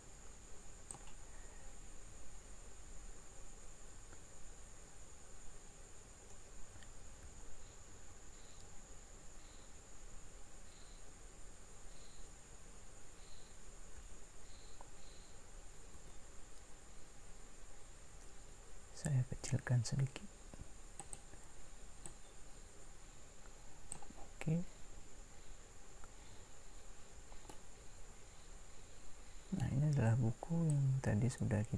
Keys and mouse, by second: 7.2 s, 8.1 y, 14.0 s, 30.8-31.7 drag.